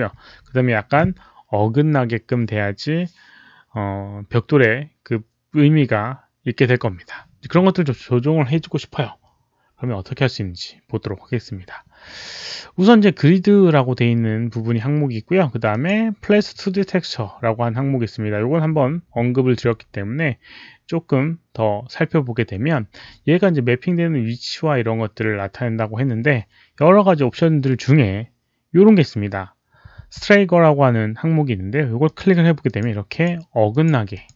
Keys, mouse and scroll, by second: 15.6 click, 20.4 click, 31.9 click, 32.6 click, 33.0 click, 33.6 click, 34.0 click.